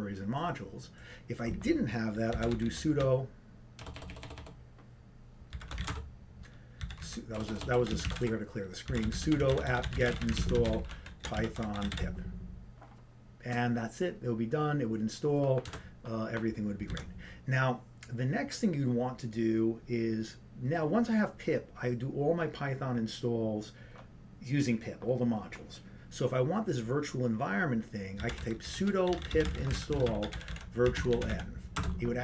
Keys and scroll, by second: 2.4-3.1 typing, 16.5 Return.